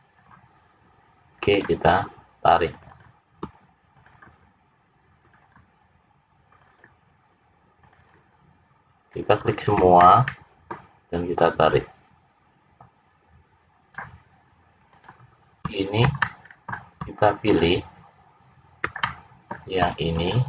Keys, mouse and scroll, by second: 0.1 click, 1.4 click, 2.6 click, 2.8 click, 3.9-5.3 shift+click, 4.1 shift+click, 5.1 click, 5.5 click, 6.6 shift+click, 6.7 shift+click, 7.8 shift+click, 8.0 shift+click, 9.1 shift+click, 9.3 shift+click, 10.0 middle click, 11.6 click, 14.9 click, 16.1 middle click, 17.4 shift+click, 19.0 middle click, 20.1 shift+click.